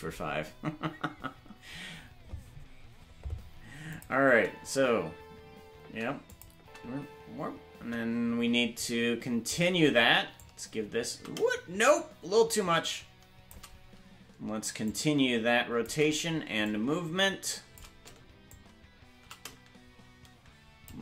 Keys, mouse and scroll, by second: 3.9 click, 4.2 space, 6.3 click, 6.3 space, 6.5 space, 8.7-9.5 drag, 8.7 space, 10.3-13.5 shift+drag, 14.8-15.9 drag, 16.6-17.8 shift+drag, 18.5-20.9 shift+drag.